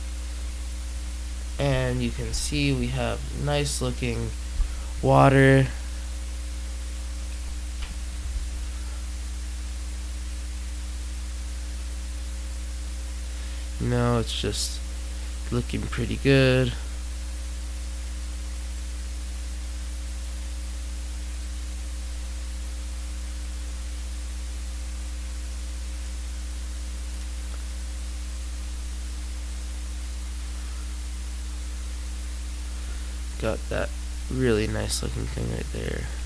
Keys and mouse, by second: 5.5-7.5 middle drag, 8.1 alt+a, 9.5-10.5 middle drag, 13.9-15.5 middle drag, 18.7 click, 24.9 click, 26.3-28.3 drag, 30.5-32.3 middle drag, 34.3-35.5 right drag, 35.5 middle click.